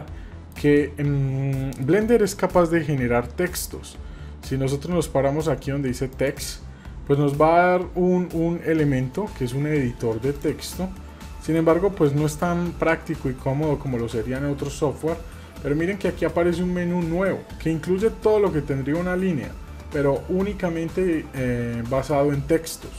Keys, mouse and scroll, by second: 0.7-1.8 shift+middle drag, 3.1 shift+a, 10.9-11.6 shift+middle drag.